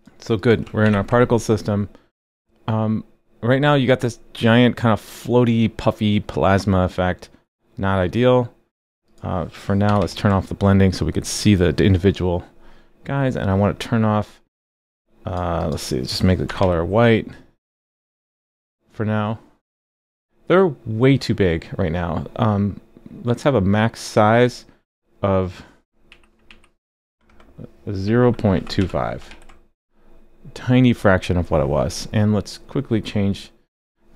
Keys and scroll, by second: 0.8 super+b, 9.8 super+/, 10.0 super+s, 16.5 super+/, 16.6 super+s, 29.3 super+s.